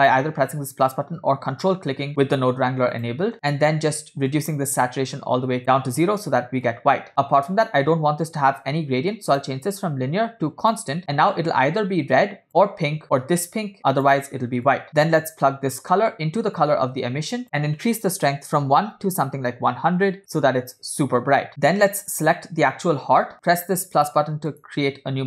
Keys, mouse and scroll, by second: 3.1 click, 6.8-7.4 drag, 9.4-10.9 drag, 11.7-12.5 drag, 13.8-14.3 drag, 14.8 click, 15.2-16.0 drag, 16.8-20.4 drag, 19.9 0, 21.5 click, 22.4 click, 24.6 click.